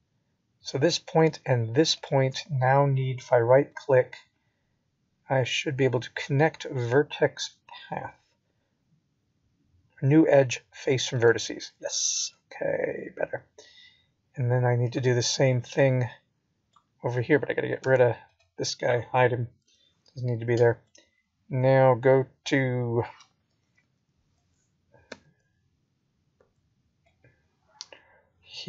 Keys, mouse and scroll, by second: 4.4 middle click, 9.0 click, 10.3 click, 12.4 click, 14.2 KP_1, 14.9-15.4 scroll up 1, 15.5-17.3 scroll up 1, 20.4 shift+click, 22.2 right click.